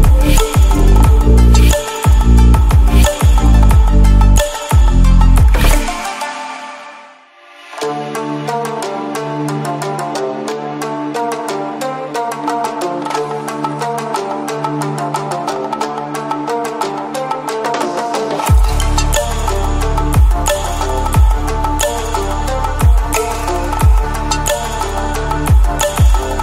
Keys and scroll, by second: 0.8 ctrl+i, 3.6-5.2 ctrl++.